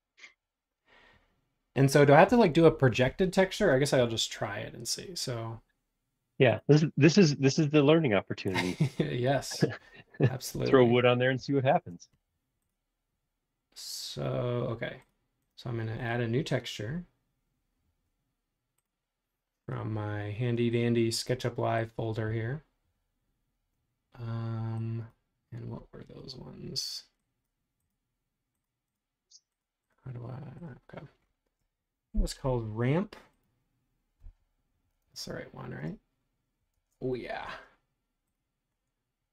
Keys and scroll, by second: 11.3 b, 35.0 super+Tab.